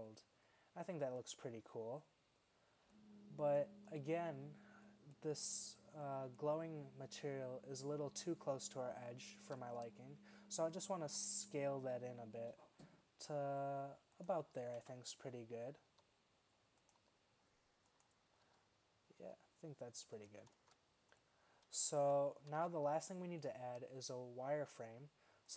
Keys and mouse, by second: 4.2 middle click, 6.9 middle click, 8.1-9.1 middle drag, 10.2 middle drag, 11.2 s, 14.9 KP_1, 16.0 s, 17.1 s, 18.5 z, 19.2 s, 20.6 shift+z, 22.1 z, 22.6 z.